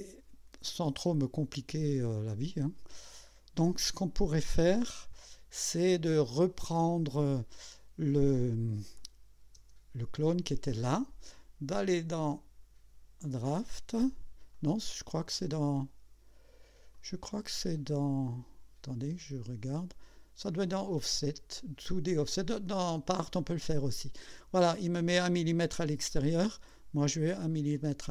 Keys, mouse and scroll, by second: 2.1 scroll up 1, 3.0 scroll down 1, 5.1-6.1 drag, 6.4 right click, 8.3 click, 9.0 click, 9.6 space, 12.3 click, 13.2 click, 14.5 click, 16.9 click, 19.5 click, 23.1 click.